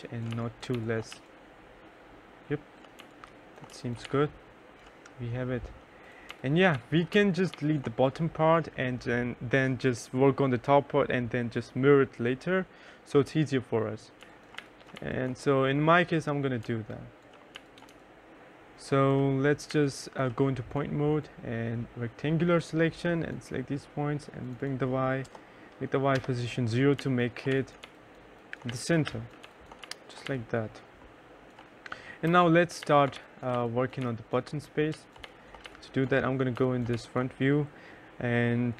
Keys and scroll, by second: 0.0-1.0 typing, 2.3 1, 3.1 2, 3.4 3, 5.4-7.4 typing, 13.3-14.8 typing, 16.0 3, 16.9 2, 17.3 3, 24.6 0, 25.5 Return, 26.3-30.1 typing, 31.6 F4, 31.9-36.3 typing.